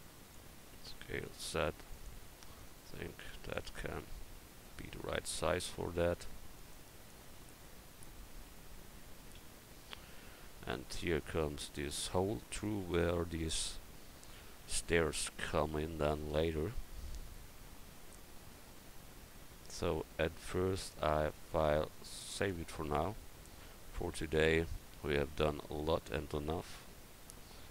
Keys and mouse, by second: 0.9 s, 2.6-5.1 drag, 5.1 s, 7.5 click, 8.5 Tab, 9.0 Tab, 9.4 a, 14.6 a, 15.1 a, 21.5-23.1 drag, 23.0 right click, 23.2 click, 23.4 middle click.